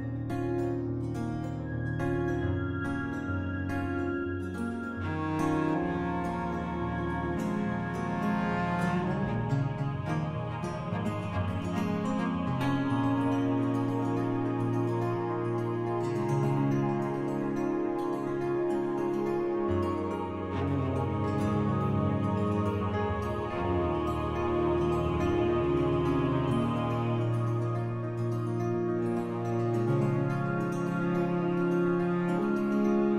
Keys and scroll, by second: 6.9 b.